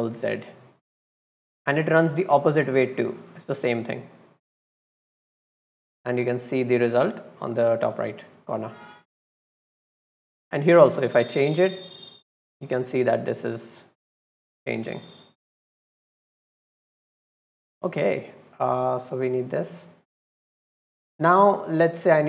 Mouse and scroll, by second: 0.9 drag, 1.8-3.0 drag, 5.5-6.1 drag, 9.5 click, 10.7 click, 11.1 click, 11.6 click, 11.9 click, 13.8 click, 14.1 click, 14.8 click, 15.2 click, 16.6 click, 17.3 click, 17.6 click, 18.5 click, 19.2 click, 19.8 click, 20.8 middle click, 21.2 click.